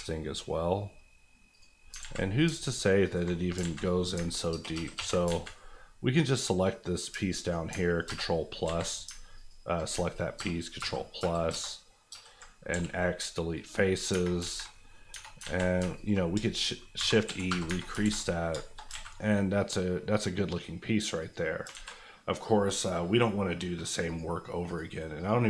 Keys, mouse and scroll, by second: 1.5 click, 1.8 scroll down 2, 2.0 alt+z, 2.6 alt+click, 3.5 alt+click, 3.6 alt+z, 3.8 middle click, 4.2 ctrl+middle click, 4.5 ctrl+KP_Add, 5.3 alt+z, 6.1-7.0 scroll up 2, 7.3 alt+click, 8.0 ctrl+KP_Add, 8.6 ctrl+z, 9.3 alt+click, 10.3 ctrl+KP_Add, 10.8 ctrl+KP_Enter, 11.5 ctrl+KP_Add, 12.0 ctrl+KP_Enter, 12.1 ctrl+KP_Add, 12.7 x, 13.5 click, 14.1 Tab, 14.4 alt+z, 14.9 middle click, 15.1 Tab, 15.4 alt+z, 15.9 alt+click, 16.2 click, 16.3 shift+click, 16.9 shift+e, 17.2 KP_1, 17.4 KP_Enter, 17.7 Tab, 18.0 alt+z, 18.2-18.6 alt+scroll down 3, 18.6 shift+middle click, 18.8 alt+middle click, 18.9 alt+a, 19.1-20.7 middle drag, 21.2 click, 21.6 alt+click, 21.7 alt+z, 23.2-24.0 scroll up 1, 24.0 click.